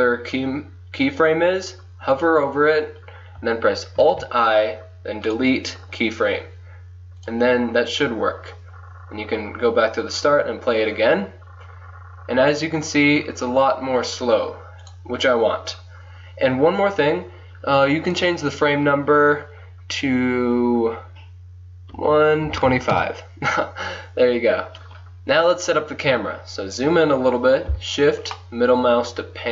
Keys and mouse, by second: 0.4 middle click, 4.0 alt+i, 7.2-9.2 drag, 10.2 click, 11.9-13.3 drag, 13.3-14.9 middle drag, 16.7 click, 17.0-18.1 middle drag, 19.0-20.1 drag, 20.1-23.4 middle drag, 25.9-27.2 middle drag, 28.4-29.5 middle drag.